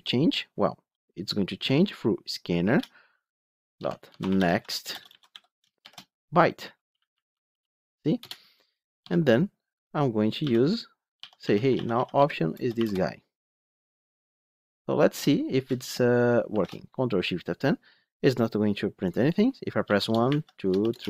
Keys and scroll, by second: 2.6 Return, 6.7 Return, 12.2 Return, 16.4 ctrl+shift+F10.